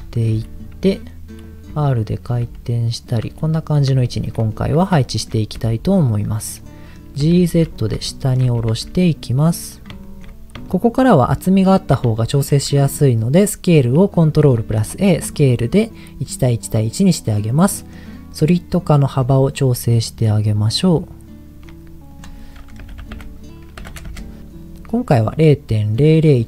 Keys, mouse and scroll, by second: 0.0-3.2 typing, 1.4 click, 2.3 click, 2.9 click, 3.8 click, 4.0 shift+middle click, 4.4-4.8 scroll up 3, 5.0 shift+middle click, 5.6 g, 6.1 click, 6.5 middle click, 7.2 g, 7.4 z, 7.8 click, 8.0 shift+middle click, 8.6 g, 8.7 z, 10.0 shift+middle click, 10.0 click, 10.2-10.6 scroll up 2, 10.6 shift+middle click, 12.2 shift+middle click, 14.4 ctrl+a, 17.5 middle click, 19.5-21.6 shift+drag, 22.1-24.2 drag.